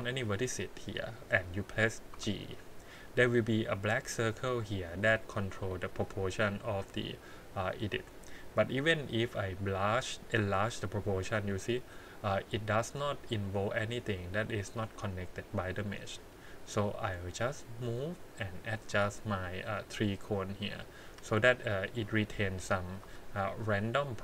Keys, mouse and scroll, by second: 0.1 click, 2.1 g, 18.5 click, 18.9 g, 20.5 click, 21.0 g, 21.9 click, 22.5 click, 22.8 click, 23.0 g.